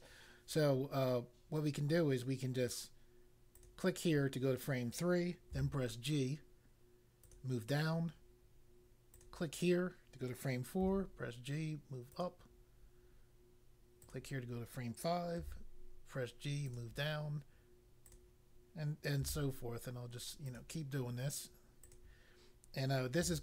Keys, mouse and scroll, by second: 3.5 click, 5.5 g, 7.2 click, 9.0 click, 10.7 g, 12.1 click, 14.0 click, 15.3 g, 16.7 click, 18.0 click, 19.2 g, 20.4 click, 21.8 click, 23.2 g.